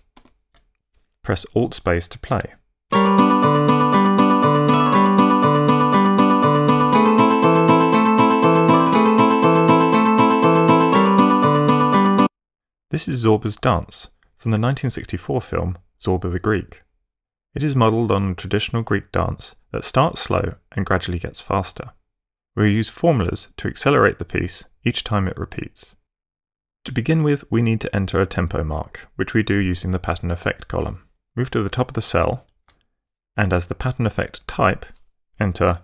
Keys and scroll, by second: 0.1 alt+5, 2.9 alt+space, 6.8 ctrl+f, 12.2 F8, 32.3 Page_Up.